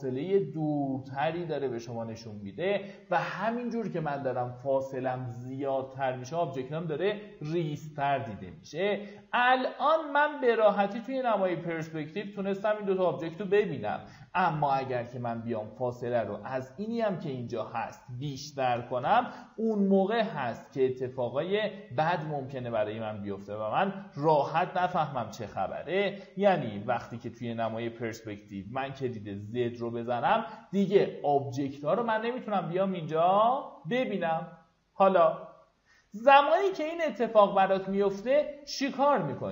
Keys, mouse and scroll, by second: 2.9 click, 9.1 alt+w, 9.7 alt+w, 10.3 typing, 11.6 click, 11.7 z, 13.6-14.8 drag, 18.7 KP_0, 21.4 click, 24.5 KP_0, 25.5 click, 26.6 p, 27.6 z, 36.6-37.5 scroll up 1, 38.1-38.8 scroll down 1, 38.8-39.5 scroll up 1.